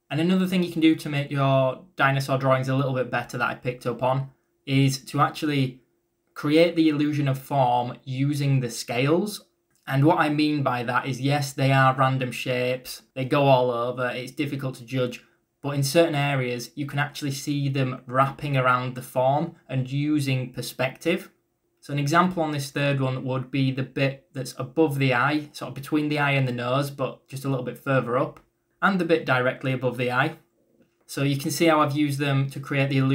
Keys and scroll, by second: 8.5 ctrl+z, 8.8 b, 11.1-12.0 typing, 15.5-16.3 typing, 21.5-22.3 typing, 24.0 b.